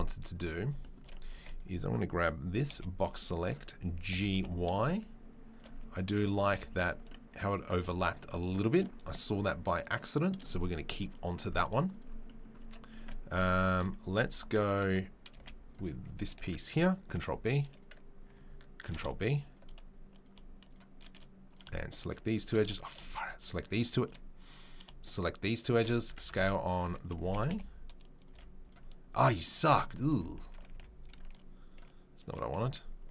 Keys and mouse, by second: 0.5 Tab, 1.3 1, 1.5-2.6 right drag, 2.6-16.1 middle drag, 2.7 b, 4.1 g, 5.7 z, 6.5 z, 7.7 Tab, 12.6 Tab, 14.2 2, 15.3 z, 16.1 alt+click, 16.2-20.1 alt+middle drag, 17.1 ctrl+b, 18.8 ctrl+b, 20.1 click, 20.2-22.0 shift+middle drag, 22.0 shift+click, 22.1 shift+middle click, 22.6 click, 22.7-31.6 shift+middle drag, 23.6 shift+click, 25.5 shift+click, 26.0 s, 27.2 s, 28.3 z, 30.1 ctrl+z, 30.4 ctrl+z, 31.6 click, 31.7-33.1 middle drag.